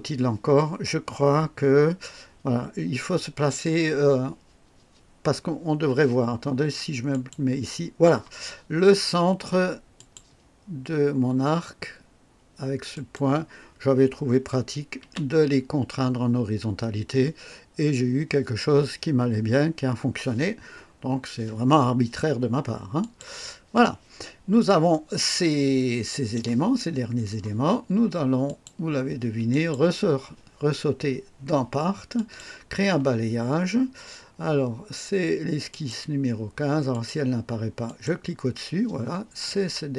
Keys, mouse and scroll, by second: 7.1 click, 9.9 click, 12.9 click, 15.0 h, 23.0 click, 24.6-26.5 drag, 28.4 click, 29.5 click, 32.1 click, 35.6 click, 36.9 click, 37.8 click, 39.4-39.9 drag.